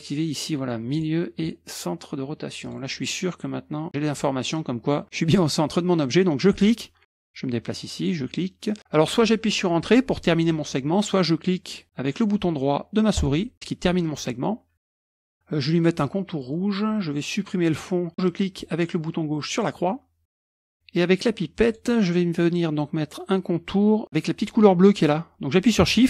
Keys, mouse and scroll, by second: 0.9-1.9 drag, 2.6 click, 6.5 click, 8.0 click, 13.2 right click, 16.4-17.2 scroll up 1, 19.5 click, 21.7 click.